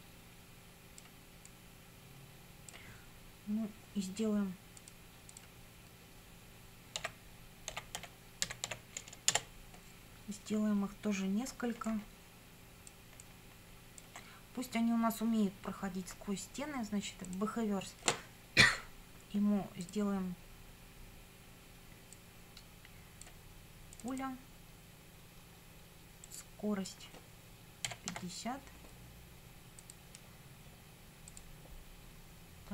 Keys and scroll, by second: 7.0-9.1 typing, 9.3 Return, 27.6-28.6 typing.